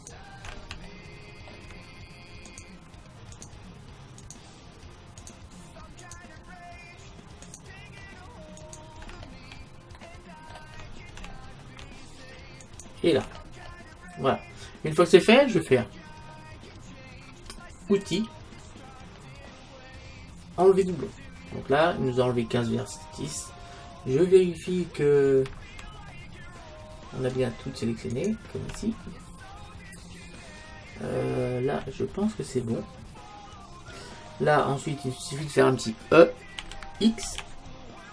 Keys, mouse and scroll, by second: 0.9-12.6 middle drag, 2.5-10.0 right drag, 10.1 right click, 12.6-14.5 right drag, 14.3-18.1 middle drag, 18.1-19.9 drag, 20.6-22.4 drag, 25.8-28.1 middle drag, 28.1-30.1 right drag, 30.1-31.4 middle drag, 32.6-34.3 middle drag, 34.4-36.2 middle drag, 36.7 e.